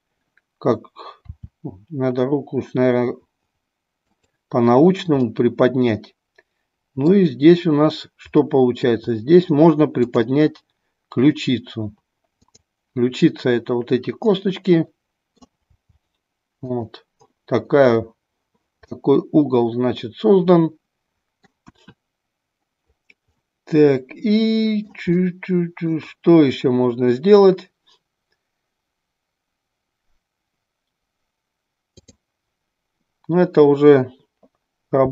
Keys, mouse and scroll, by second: 1.4 r, 4.0 click, 5.3-7.1 middle drag, 8.4 middle click, 14.3 middle click, 15.8 r, 18.9-21.4 middle drag, 23.4-24.8 middle drag, 25.3 middle click, 32.0 click, 34.9 r.